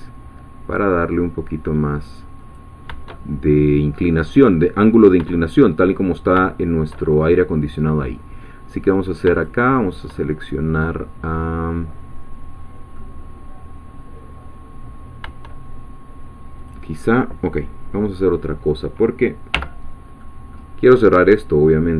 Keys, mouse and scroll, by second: 2.4 click, 3.2-5.2 shift+middle drag, 6.6 shift+middle click, 8.9 click, 9.3 shift+click, 10.8-15.2 middle drag, 16.6 click, 18.6-19.5 scroll up 1, 19.5 2, 20.2-21.2 middle drag, 21.2 click.